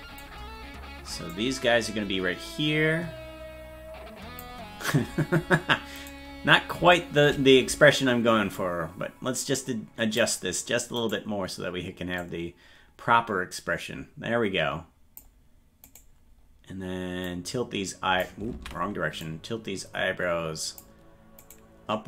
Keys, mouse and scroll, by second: 1.3-4.4 drag, 6.0 right click, 8.5-10.2 drag, 11.1 right click, 12.2-15.2 drag, 15.9 right click, 17.2 click, 18.6 ctrl+z, 19.2-20.8 drag, 21.5-22.0 right drag.